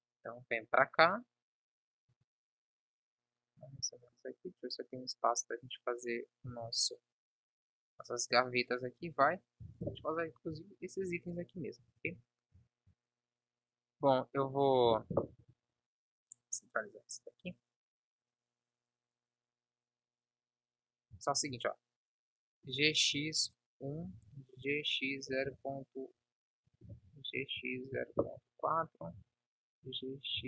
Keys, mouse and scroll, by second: 1.1 click, 2.1 KP_1, 3.9 shift+d, 9.6 Delete, 12.0 n, 14.8 Delete, 21.3 shift+d, 22.7 g, 24.1 ctrl+z, 24.5 g, 26.9 ctrl+z, 27.2 g, 29.2 ctrl+z, 29.9 g.